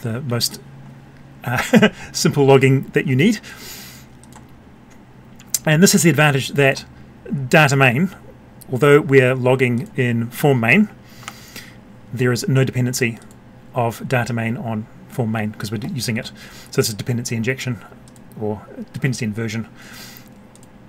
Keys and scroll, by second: 11.1 F12.